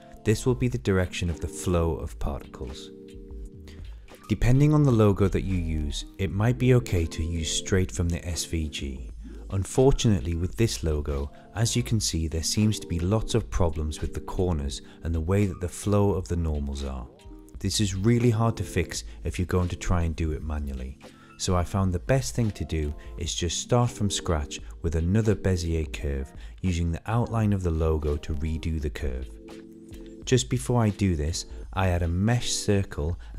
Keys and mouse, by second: 2.1 click, 2.4 click, 3.7 click, 4.7 e, 7.0 shift+middle click, 7.8 r, 8.4 click, 10.0 a, 11.1-12.4 drag, 13.4 click, 15.6 shift+middle click, 16.4 click, 17.9 shift+middle click, 18.7 Tab, 19.1 click, 19.9 Tab, 21.6 click, 22.4 shift+click, 22.9 shift+click, 23.5 shift+click, 24.4 Delete, 25.5 click, 26.2 shift+click, 26.7 shift+click, 27.7 Delete, 28.9 Tab, 30.1 shift+a.